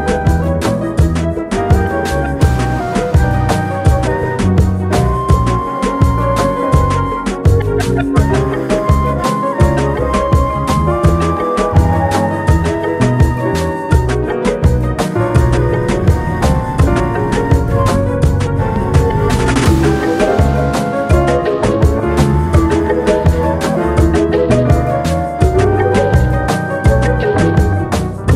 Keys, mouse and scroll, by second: 2.1 Tab, 2.7 ctrl+r, 4.7-5.0 scroll up 2, 5.5 click, 6.0 alt+click, 6.9 alt+e, 10.1 alt+middle click, 11.2 s, 13.1-14.3 middle drag, 14.3 click, 15.4 e, 18.8 scroll down 1, 19.4-20.5 middle drag, 20.5 Tab, 20.9-21.2 scroll down 2, 21.2-22.8 middle drag, 23.3-23.9 scroll down 1, 23.9-24.6 middle drag, 24.6 shift+a, 26.3 alt+middle drag, 26.7 scroll up 2, 27.1 g.